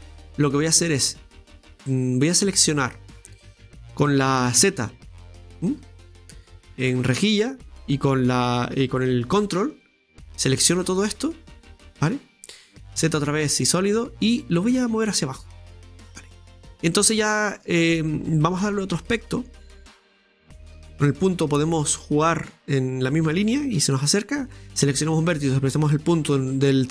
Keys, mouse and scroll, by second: 0.0 right click, 9.8-12.9 ctrl+drag, 14.9-16.6 drag, 16.6-17.8 middle drag, 17.8-18.6 scroll up 1, 18.7 right click, 19.2 shift+right click, 19.6 shift+right click, 20.5 middle click, 20.9 KP_Decimal, 21.7-23.5 middle drag, 23.6 shift+right click, 23.9 scroll down 3, 26.6-26.9 middle drag.